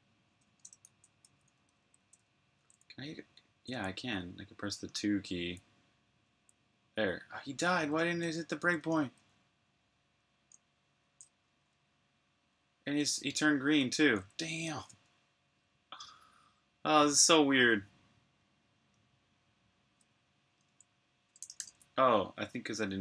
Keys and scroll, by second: 3.5 typing, 5.4-6.2 typing, 7.6-9.1 typing, 10.2-10.9 typing, 12.1-13.4 typing, 14.6 super+q, 21.3 g, 22.8-23.0 typing.